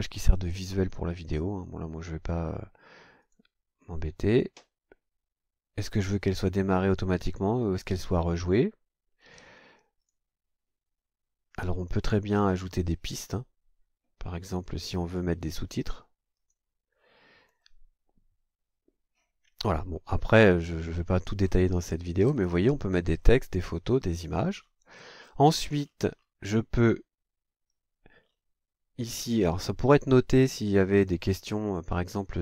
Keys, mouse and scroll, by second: 3.2 click, 4.3 click, 9.2 click, 10.0 click, 16.4 click, 17.5-17.8 scroll down 1, 20.4-21.7 scroll up 5, 22.2 scroll up 1, 23.2 scroll up 2, 24.0-24.4 scroll up 1, 24.6-26.4 scroll down 12, 28.2-28.5 scroll down 2, 29.8 click.